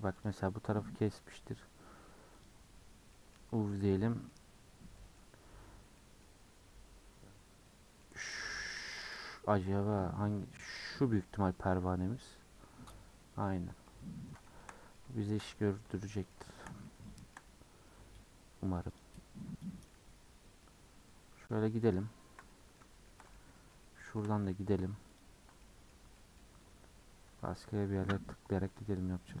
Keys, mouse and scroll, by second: 1.5-2.4 scroll down 1, 2.4 click, 12.0-14.1 middle drag, 14.1-14.4 scroll down 2, 14.4-15.4 middle drag, 15.4-15.9 scroll up 4, 15.9 click, 16.1 shift+middle click, 16.8 scroll up 1, 16.9 shift+middle click, 17.5-19.0 scroll up 1, 19.0 click, 19.2-19.6 scroll down 4, 19.6 middle click, 20.0 scroll up 2, 20.3-20.8 scroll down 1, 20.8-21.9 middle drag, 21.9 ctrl+click, 22.5-25.2 middle drag, 25.2 ctrl+click, 25.6 middle click, 26.4-27.9 scroll up 4, 27.9-29.4 middle drag.